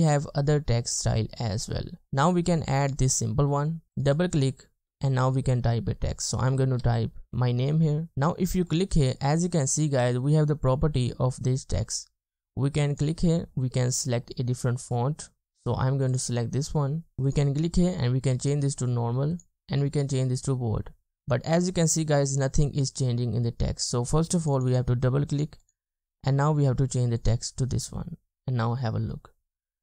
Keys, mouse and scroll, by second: 1.7-3.0 scroll up 1, 4.1 double click, 6.8-7.3 typing, 15.2-16.0 scroll down 1, 16.0 typing, 24.6 double click.